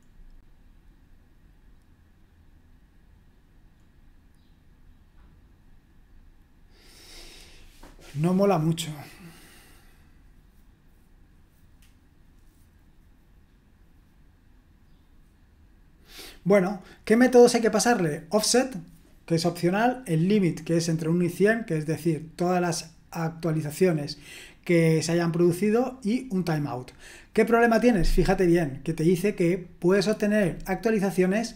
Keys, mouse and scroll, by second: 0.2-1.1 scroll up 1, 1.1-31.5 scroll up 1.